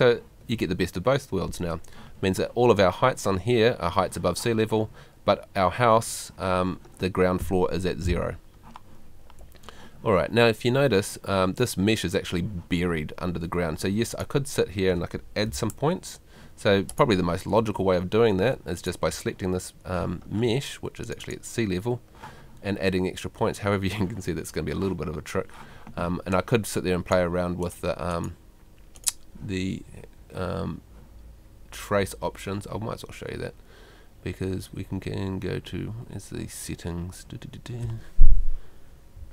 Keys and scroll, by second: 15.5 F2, 17.6 Escape, 20.0 Escape.